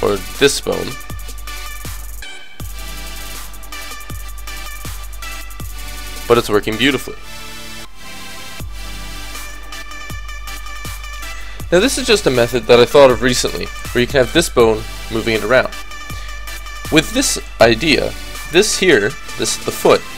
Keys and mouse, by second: 1.7-2.8 middle drag, 2.8 click, 3.5 middle click, 4.6-6.4 drag, 4.9 r, 7.0-8.7 drag, 7.7 r, 9.6 r, 12.0-13.9 drag, 14.1 g, 15.7 KP_3, 18.0-19.1 drag.